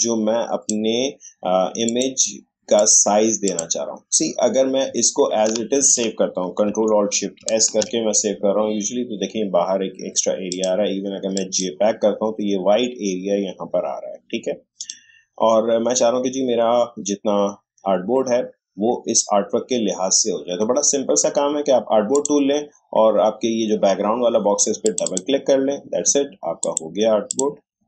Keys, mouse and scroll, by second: 7.2 ctrl+alt+shift+s, 10.5 click, 14.8 click, 22.1 click, 24.8 click.